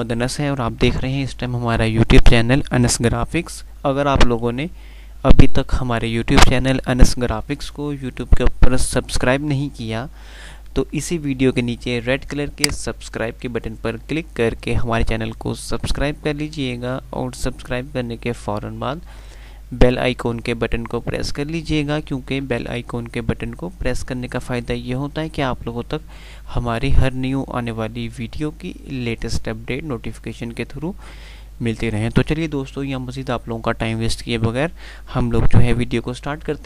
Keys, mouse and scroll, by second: 10.4 F5, 12.8 click, 13.2 scroll down 1, 20.0-20.7 scroll down 1, 22.9-23.4 scroll up 1.